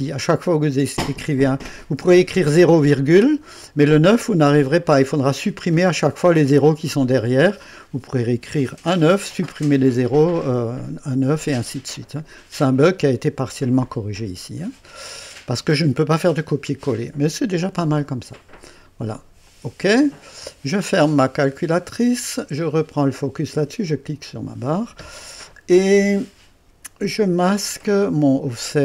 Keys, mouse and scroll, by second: 19.4 click, 21.4 click, 23.9 click, 28.4 click.